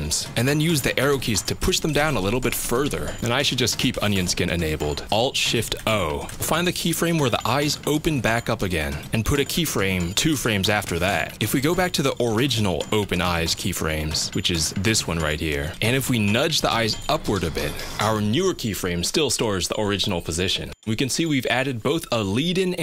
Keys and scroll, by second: 1.3 Down, 1.4 Down, 1.6 Down, 1.7 Down, 11.2 F6, 16.4 Up, 16.5 Up, 16.7 Up, 16.8 Up.